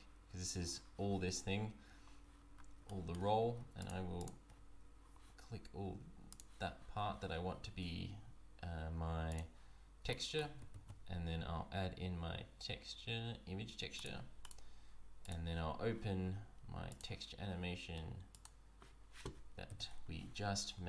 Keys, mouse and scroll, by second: 1.3 Tab, 2.5-2.8 scroll down 2, 2.8 shift+middle click, 3.3 scroll down 1, 3.8 shift+click, 4.1 shift+click, 6.3 click, 9.3 click, 10.1 shift+middle click, 10.7 shift+a, 15.2 click.